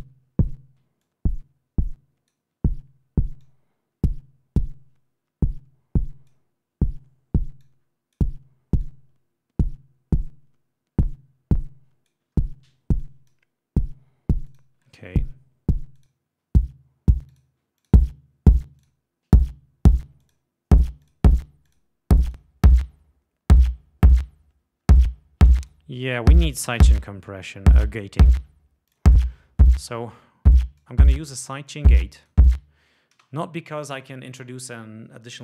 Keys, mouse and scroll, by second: 1.1-2.6 drag, 3.5-6.6 drag, 7.7 click, 8.9-12.4 drag, 13.1 click, 14.5 click, 16.0 click, 17.5 click, 18.0 click, 19.0 click, 20.4 click, 21.2 click, 21.8 click, 22.4 click, 25.8 right click, 29.1 click, 30.7 click, 31.9 click, 33.3 space.